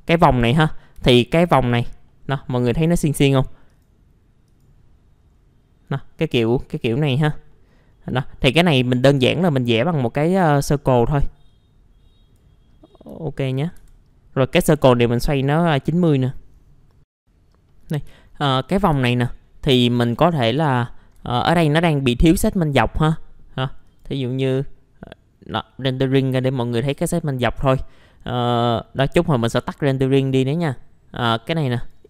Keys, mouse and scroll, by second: 0.8 scroll up 1, 1.6-2.1 scroll down 1, 2.1 middle click, 3.7 click, 5.3-5.7 scroll up 1, 6.5-7.5 scroll down 1, 7.5 middle click, 8.8-9.2 scroll up 1, 9.3 ctrl+right click, 10.4-12.8 drag, 12.9 middle click, 13.2 alt+middle click, 15.5 right click, 16.3 middle click, 17.2 ctrl+r, 18.1 alt+middle click, 18.7 scroll up 1, 18.9 F4, 19.4-19.8 scroll up 1, 19.8 typing, 20.2 click, 21.7-23.8 scroll up 1, 23.8 click, 26.6 middle click, 26.6-27.0 scroll down 1, 27.1 middle click, 30.0 click.